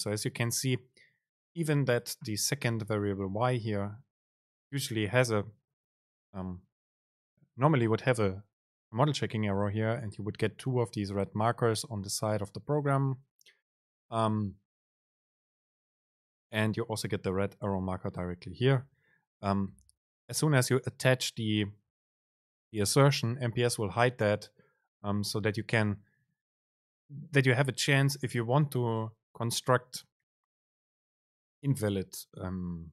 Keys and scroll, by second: 3.0 BackSpace.